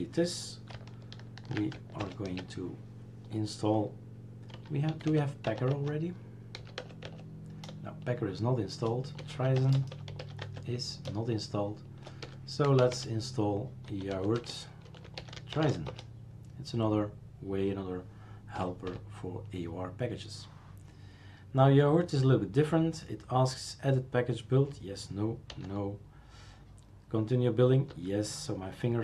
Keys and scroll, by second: 2.0 super+Return, 4.5 p, 6.4-12.8 typing, 14.4 BackSpace, 15.6 BackSpace, 18.6 4, 25.5 n, 27.9 y.